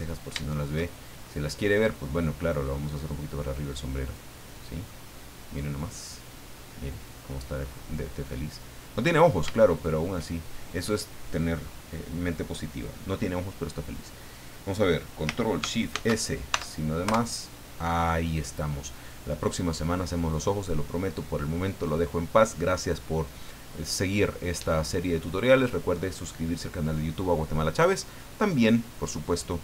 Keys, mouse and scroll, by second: 1.6 shift+right click, 3.2 click, 4.4 middle click, 6.0-6.3 scroll up 2, 6.9 scroll down 2, 9.1 scroll down 2, 9.6 shift+middle click, 15.9 ctrl+shift+s, 16.5 ctrl+shift+KP_Add, 17.0 KP_Enter.